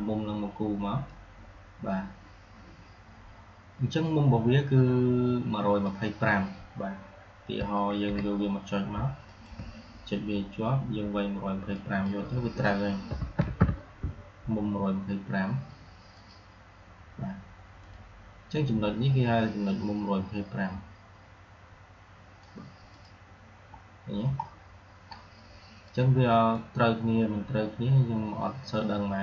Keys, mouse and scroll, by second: 1.0-5.9 drag, 8.0 ctrl+z, 9.1 shift+click, 16.0-22.3 drag, 23.7-24.1 alt+scroll down 2, 24.9 alt+scroll up 1, 25.1-25.7 alt+scroll down 2, 25.7-26.6 drag.